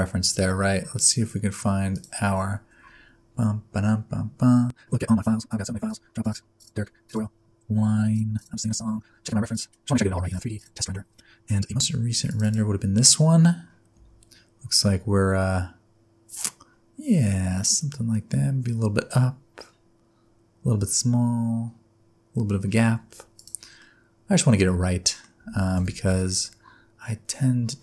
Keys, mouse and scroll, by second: 23.4 click, 23.8 middle click, 25.4 Tab, 25.7 a, 26.0 s.